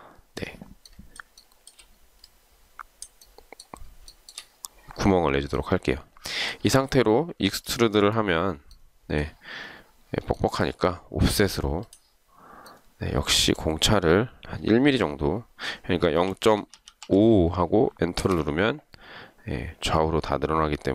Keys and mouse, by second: 1.5 shift+right click, 4.2 shift+right click, 10.5 shift+right click, 16.2-17.4 typing, 18.3 Return.